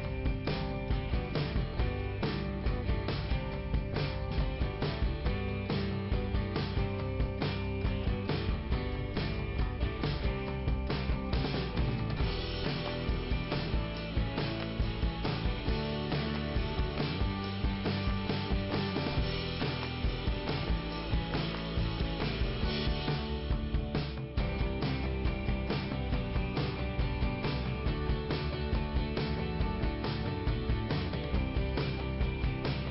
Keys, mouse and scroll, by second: 0.3 right click, 1.1 click, 2.8 click, 4.5 click, 4.9 click, 6.5 click, 7.2 middle click, 11.2 click, 11.6 click, 11.9 click, 12.6 scroll down 2, 13.6 scroll down 2, 14.5 right click, 14.8 right click, 17.5 click, 19.5 middle click, 20.3 scroll down 2, 22.7 scroll up 2, 23.2 right click, 24.2 click, 25.4 click, 25.4-25.7 scroll down 1, 27.3 click, 27.8 ctrl+,.